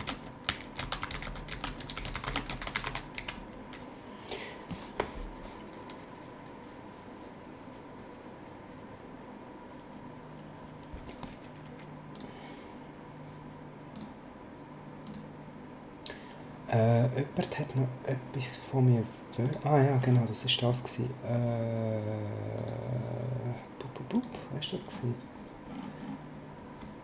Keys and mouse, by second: 0.0-3.2 typing, 12.1 click, 13.9 click, 15.0 click, 19.4 click, 22.5 click, 24.1 click.